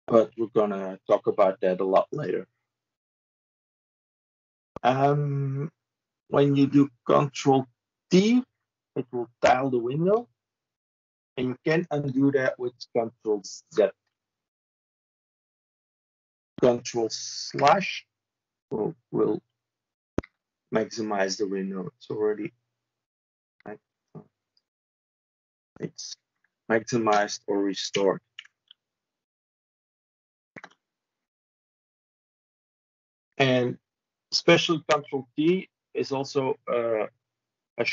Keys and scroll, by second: 13.6 ctrl+z, 17.4 ctrl+/, 20.0 ctrl+/, 27.8 ctrl+/, 28.4 ctrl+/.